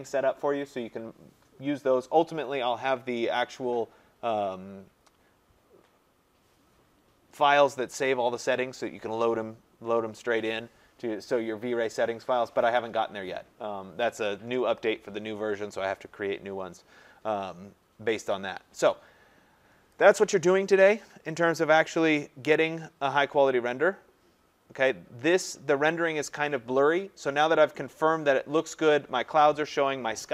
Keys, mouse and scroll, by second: 0.6 scroll, 1.2 scroll down 6, 1.9-2.2 scroll down 3, 11.1-13.1 scroll up 20, 17.2-18.1 scroll, 20.1 click, 23.7 scroll, 24.2 middle click, 24.3 middle click, 25.2 middle click, 25.3 middle click, 25.5 middle click, 27.1 middle click, 27.1 middle click, 27.2 scroll.